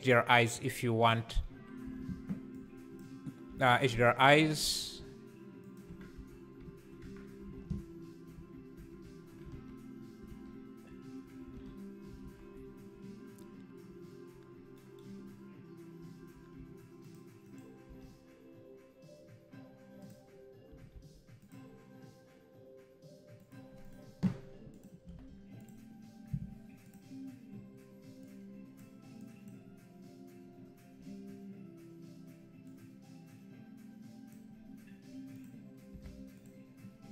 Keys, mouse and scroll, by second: 0.0 click, 3.5 alt+a, 3.7 click, 4.4 g, 5.9 Tab, 6.1 z, 7.0 Tab, 8.5 z, 8.7 Tab, 9.5 alt+a, 17.0 shift+right click, 20.1 shift+a, 20.7 g, 25.6 KP_0, 28.2 click, 32.7-36.4 drag.